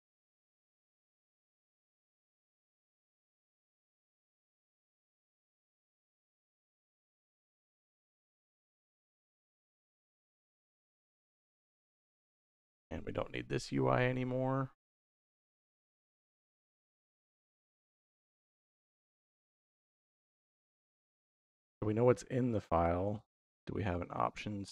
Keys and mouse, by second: 0.5-1.7 drag, 1.9 click, 3.4 click, 5.0-6.2 drag, 6.5 click, 7.9 middle click, 9.3 middle click, 10.2-11.6 drag, 12.3 middle click, 13.2 click, 15.9 x, 16.5 middle click, 20.4 click, 21.9 click, 22.5 shift+a.